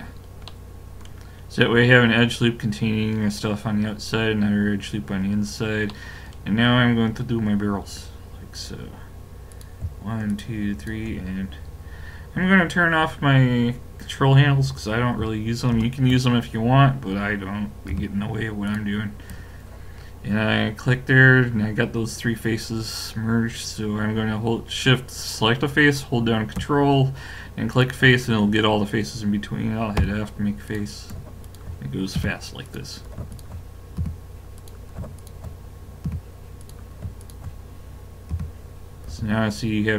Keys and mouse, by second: 6.8-9.5 middle drag, 9.5-12.7 drag, 15.7 ctrl+space, 17.9 f, 18.7 click, 27.7 click, 30.0 f, 30.7-39.1 drag, 32.2 f, 34.0 f, 36.1 f, 38.4 f, 39.1 a.